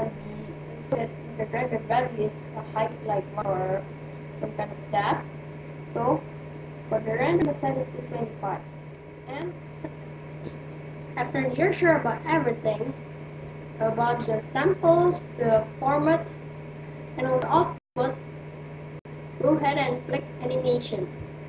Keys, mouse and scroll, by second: 15.9-20.0 middle drag.